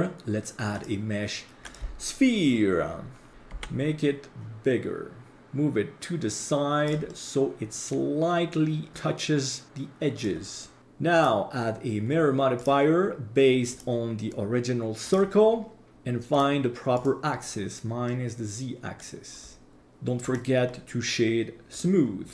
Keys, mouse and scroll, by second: 3.3 click, 3.5 s, 5.4-6.9 drag, 5.4 middle click, 7.0-8.9 middle drag, 8.9-10.3 drag, 10.6 middle drag, 11.1-12.6 drag, 13.7-15.2 drag, 16.3 click, 16.9 click, 18.1-19.0 middle drag, 20.2-21.8 drag.